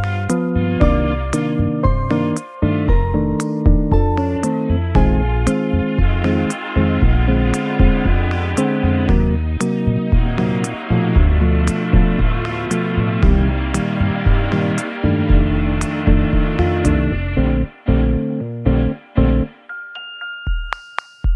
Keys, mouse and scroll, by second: 2.1-2.4 scroll up 2, 2.8 w, 2.8 g, 4.4 middle click, 4.8 middle click, 5.1 g, 6.6 click, 7.4 scroll up 1, 10.9 shift+c, 10.9-11.5 scroll up 8, 12.5 shift+a, 12.9 shift+a, 14.2-14.5 scroll down 4, 15.3 s, 18.9 s, 19.5 scroll up 1, 21.2 Tab.